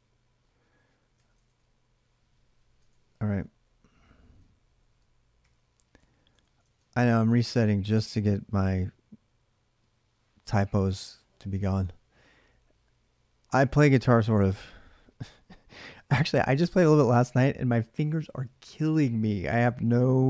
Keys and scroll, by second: 1.0 ctrl+[, 1.2 typing, 1.4 Return, 2.7 ctrl+[, 2.7 shift+z, 2.9 shift+z, 4.6 ctrl+a, 5.2-6.6 typing, 6.5 ctrl+[, 7.1 Return, 7.9 alt+Tab.